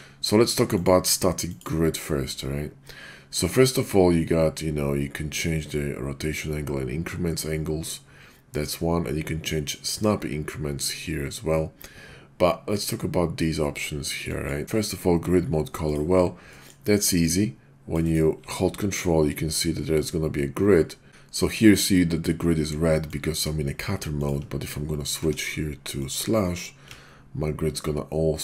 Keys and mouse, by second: 0.6-16.1 drag, 16.5 middle click, 17.1-18.0 drag, 18.0 click, 21.1 ctrl+z, 23.0-23.8 ctrl+drag, 24.2 ctrl+click, 25.2 d.